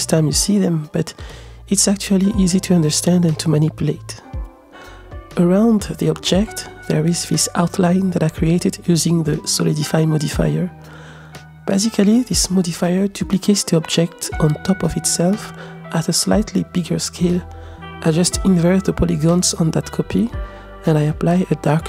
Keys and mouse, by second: 6.2 click, 7.3 middle click, 8.5-11.1 middle drag, 11.8 click, 13.0 click, 13.4 click, 14.1 middle click, 16.6 click, 19.2 click, 20.1 middle click, 21.2 click, 21.7 click.